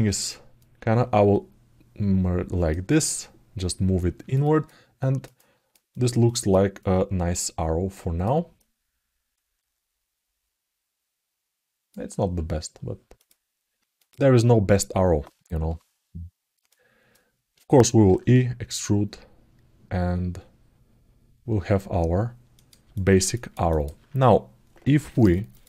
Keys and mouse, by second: 0.4-2.4 drag, 2.8-4.1 alt+middle drag, 4.2 ctrl+alt+middle click, 4.8 alt+middle click, 5.1 ctrl+alt+right click, 5.2 ctrl+alt+middle click, 5.8 ctrl+alt+middle click, 6.5-8.0 alt+middle drag, 8.4-11.6 alt+middle drag, 11.2 alt+click, 12.9 click, 13.8 click, 16.4 alt+middle click, 22.7 alt+middle click, 23.1 ctrl+alt+middle click, 23.4 alt+middle click, 25.3-25.6 drag.